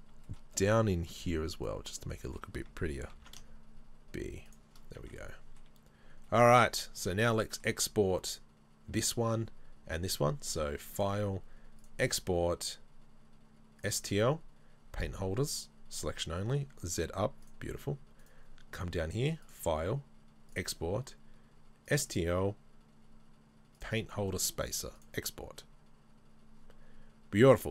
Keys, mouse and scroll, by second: 0.3 shift+middle click, 0.5 scroll up 1, 1.4 middle click, 1.4 scroll up 1, 1.5 alt+right click, 2.1 middle click, 3.2 ctrl+b, 4.8-5.2 scroll down 2, 5.2 middle click, 5.9-13.9 middle drag, 6.1 scroll down 1, 17.5 click, 18.2-23.3 right drag, 25.4-27.7 drag.